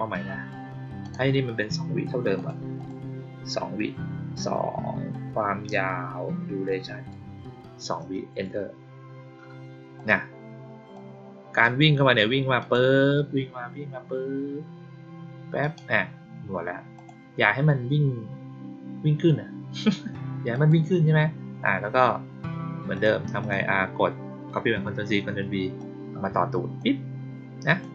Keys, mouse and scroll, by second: 0.9 click, 2.3 click, 2.7 click, 6.6 click, 9.9 click, 10.8-11.5 drag, 12.5 click, 15.5 click, 16.9 click, 20.4 click, 22.8 click, 23.3 click, 25.7-26.7 drag, 27.6 click.